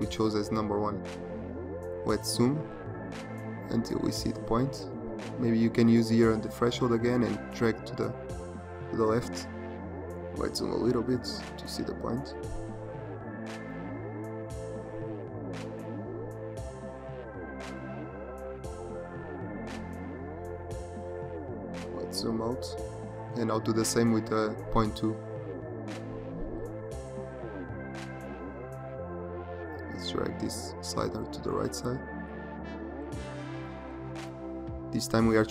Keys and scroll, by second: 1.6 z, 21.4 z.